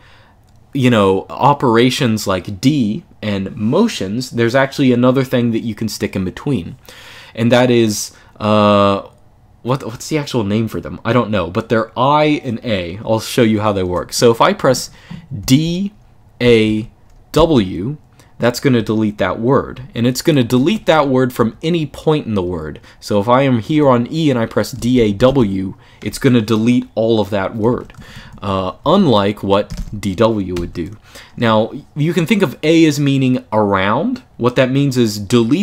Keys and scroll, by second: 15.1 d, 16.2 a, 17.1 w, 19.5-21.6 typing, 24.3-25.5 typing, 27.2-30.3 typing.